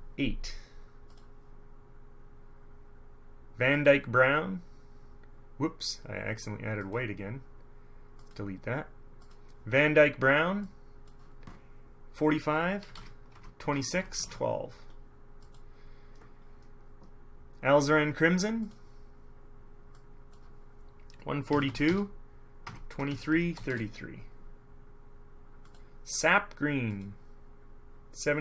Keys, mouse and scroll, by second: 1.3 click, 3.9 click, 7.0 click, 8.3 click, 9.4 click, 10.8 click, 13.0-14.4 typing, 13.5 Tab, 14.1 Tab, 15.6 click, 18.8 click, 20.1 click, 21.6 KP_1, 21.8 KP_4, 22.0 KP_2, 22.8 Tab, 23.1 KP_2, 23.2 KP_3, 23.4 Tab, 23.7 KP_3, 25.8 scroll up 2, 27.1 scroll up 2.